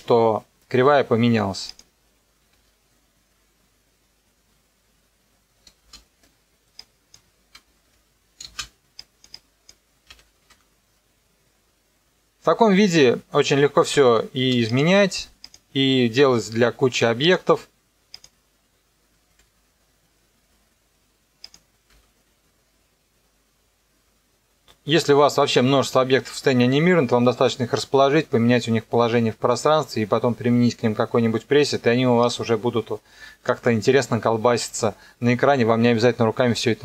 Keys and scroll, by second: 2.5 KP_0, 5.8 space, 7.9 KP_0, 8.5 space, 10.0 n, 10.4 KP_0, 14.4 space, 19.4 KP_0, 21.9 KP_0.